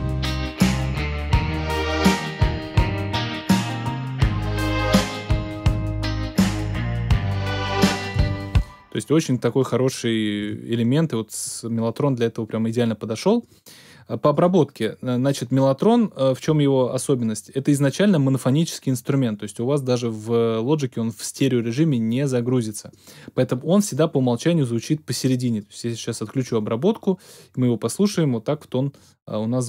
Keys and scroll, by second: 8.1 space, 10.4 x.